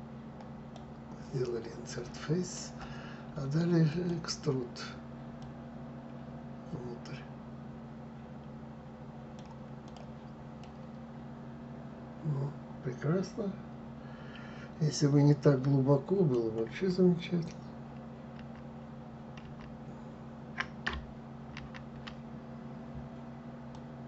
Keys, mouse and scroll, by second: 1.8-3.6 middle drag, 3.6 click, 5.0 click, 9.5 click, 10.3-13.4 middle drag, 18.0 shift+z, 19.1 shift+z, 21.2 ctrl+z, 23.4 click.